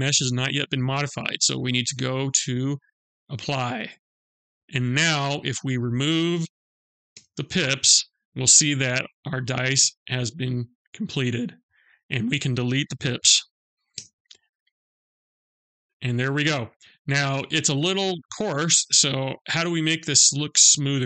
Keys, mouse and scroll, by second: 2.1 click, 5.2 click, 6.5 g, 7.9 middle click, 10.9-11.6 scroll up 1, 11.6 click, 13.3 Delete, 14.5 scroll down 1, 14.7 middle click, 16.6-17.2 scroll up 2, 17.3 scroll up 1, 17.8 middle click.